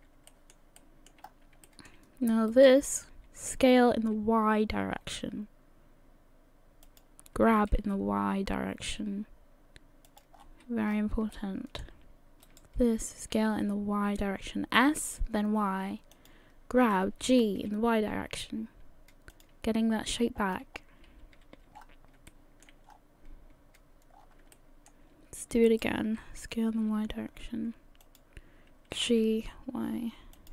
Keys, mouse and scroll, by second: 0.3 shift+middle click, 0.8 shift+middle click, 1.2-1.6 scroll up 3, 1.7 shift+middle click, 2.5 alt+right click, 3.5 s, 7.5 g, 10.4-10.8 scroll down 7, 10.8-11.2 scroll up 7, 11.3 shift+middle click, 12.5 alt+right click, 13.2 s, 17.0 g, 19.9 scroll down 2, 20.5 scroll down 1, 20.7-21.4 scroll up 4, 21.4 a, 21.8-22.2 scroll down 5, 21.8 a, 22.3 shift+middle click, 22.9-23.8 scroll up 2, 24.2 scroll down 2, 24.5 shift+middle click, 25.7 alt+right click, 26.4 s, 29.0 g.